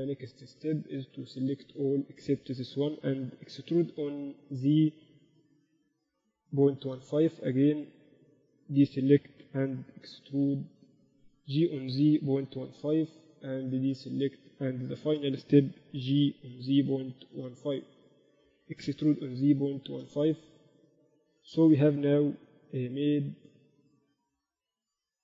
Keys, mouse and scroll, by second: 3.1 click, 3.2 e, 4.0 right click, 5.7 g, 8.8-10.4 right drag, 9.6 e, 11.9 g, 14.6-16.5 right drag, 16.6 g, 18.5 ctrl+z, 19.3 e, 21.0 ctrl+z, 21.6 g.